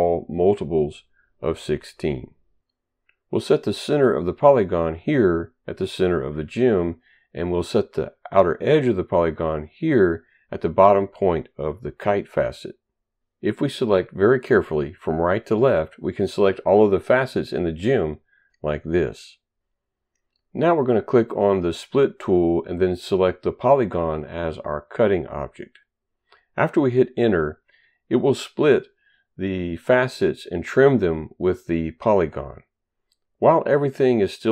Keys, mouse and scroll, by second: 4.4 click, 10.3 click, 18.0 click, 22.2 click, 24.1 click, 26.9 Return.